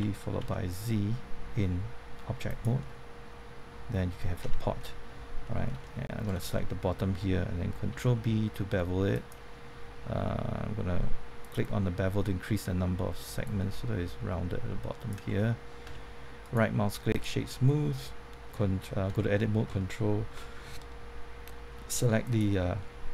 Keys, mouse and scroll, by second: 0.0-0.9 typing, 2.4 click, 2.8 middle click, 4.4 Tab, 4.8 middle click, 5.8 shift+middle click, 7.9 ctrl+b, 9.1 click, 9.4-11.4 scroll up 1, 11.4-15.6 drag, 15.8 Tab, 16.4 right click, 17.1 click, 17.4-18.6 middle drag, 19.0 Tab, 22.2 alt+click.